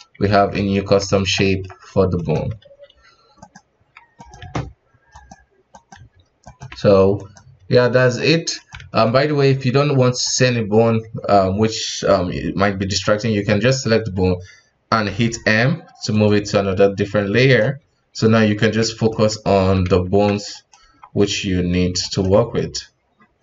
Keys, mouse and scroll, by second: 0.3 ctrl+Tab, 0.5 right click, 1.1 right click, 1.4 middle click, 1.7 g, 2.3 KP_1, 2.7 s, 4.2 right click, 4.4 g, 5.7 right click, 6.0 g, 7.1 right click, 7.4 g, 8.5 right click, 8.7 alt+a, 9.1 middle click, 9.4-10.2 scroll up 2, 10.2 right click, 10.7-13.7 scroll down 2, 15.0 m, 16.9 KP_1, 17.4 right click, 17.8 r, 19.1 middle click, 19.6 r, 20.8 KP_1, 22.0 right click, 22.3 g.